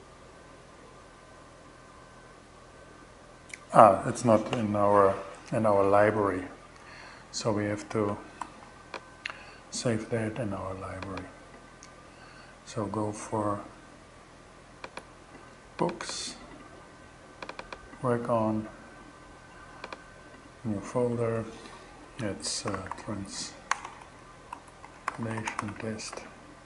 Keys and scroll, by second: 7.8 shift+super+s, 21.9-26.6 typing.